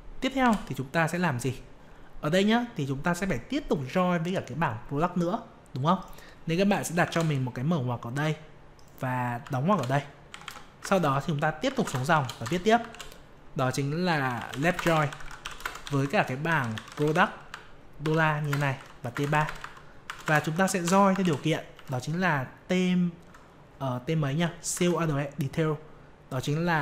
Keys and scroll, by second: 24.7 alt+Tab.